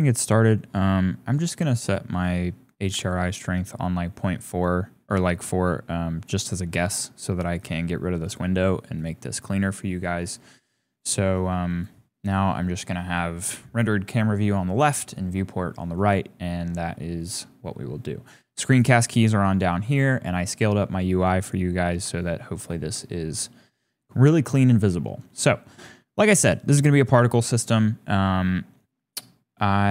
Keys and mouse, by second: 0.2 click, 1.4 click, 1.9-2.9 drag, 6.4 drag, 7.6-9.0 drag, 10.4 click, 15.3 click, 15.5 right click, 16.2 right click, 16.7 shift+right click, 22.2 shift+click, 22.8-23.2 shift+drag, 24.0 shift+click, 27.2 shift+a.